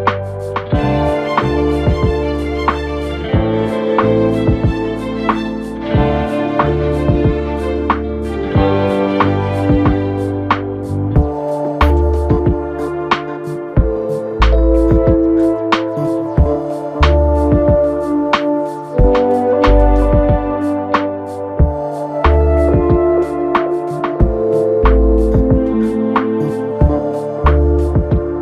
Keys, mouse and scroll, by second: 0.5 click, 0.7 f, 1.9 1, 2.6 click, 3.5 e, 6.5 2, 7.7 click, 8.1 f, 8.9 click, 9.2 f, 9.9 KP_3, 11.1 1, 11.9 click, 12.7 click, 14.8 click, 15.4 click, 17.0-17.6 scroll down 2, 17.6 shift+middle click, 18.1-18.5 scroll up 2, 18.8 click, 19.6 shift+click, 20.5 f, 21.0-23.2 right drag, 23.2-24.6 drag, 25.0 shift+click, 25.6 click, 27.0 KP_1.